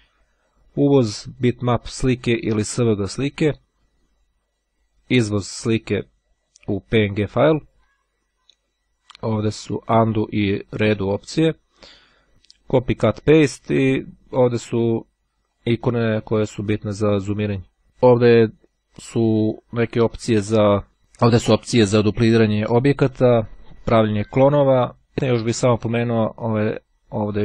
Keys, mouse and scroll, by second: 14.9 click, 15.3-17.3 drag.